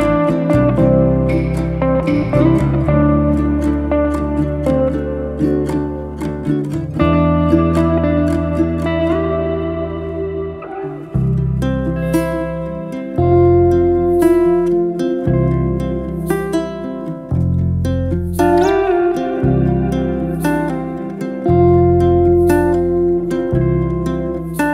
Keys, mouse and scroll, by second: 0.0-1.1 shift+r, 2.0 ctrl+z, 3.3 ctrl+z, 3.5-4.3 ctrl+z, 4.4 ctrl+z, 4.5 ctrl+z, 4.6 ctrl+z, 4.8 ctrl+z, 5.4-6.4 scroll down 2, 6.4-7.9 shift+middle drag, 8.0 click, 9.2 click, 10.6 click, 11.4 ctrl+z, 11.9 click, 12.5 ctrl+z, 13.1-15.4 drag, 15.7-17.2 drag, 18.4-20.0 scroll up 1, 22.7 alt+d.